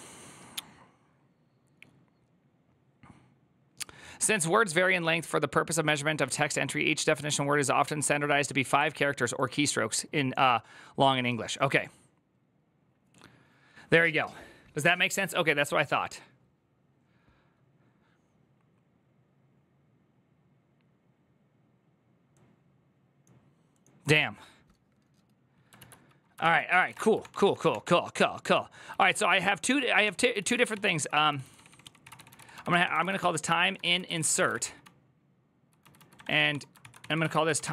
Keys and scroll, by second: 25.6 alt+{, 26.2 ctrl+c, 26.3 ctrl+c, 26.3-27.1 typing, 27.2 ctrl+d, 28.4-37.7 typing.